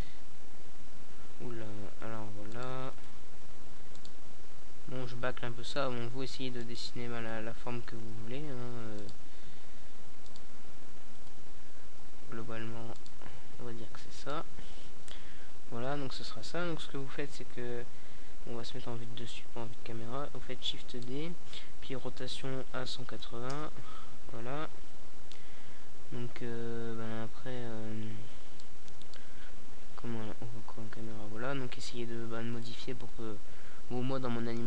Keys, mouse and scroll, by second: 0.4 r, 0.6-1.7 right drag, 1.7 middle click, 2.6 right click, 3.8 r, 4.8 click, 5.1 g, 6.9-8.0 drag, 7.8 r, 8.9 g, 10.7 Tab, 14.4 KP_7, 16.0 shift+d, 17.2 click, 17.4 r, 24.2 click, 25.2 KP_0, 27.3 Tab, 28.0-29.7 right drag, 29.2 g, 31.0-32.8 drag, 31.1 r, 33.0-34.6 drag, 33.6 g.